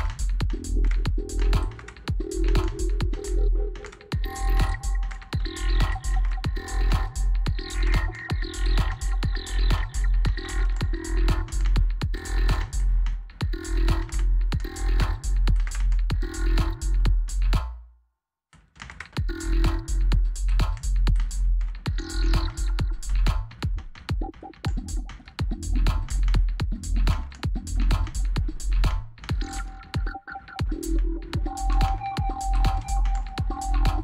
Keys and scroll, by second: 15.3 space, 17.0 space, 18.6 space, 20.9 space.